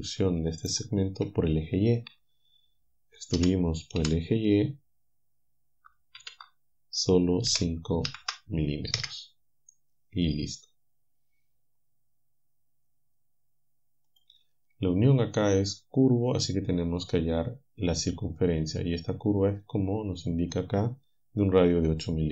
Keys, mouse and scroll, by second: 0.6 shift+click, 3.4 e, 6.2 shift+0, 7.5 5, 8.2 m, 9.0 Return, 14.1 click.